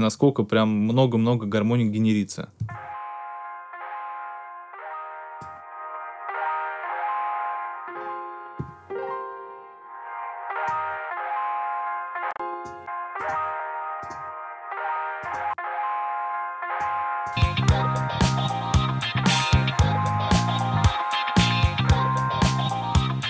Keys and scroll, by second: 2.5 space.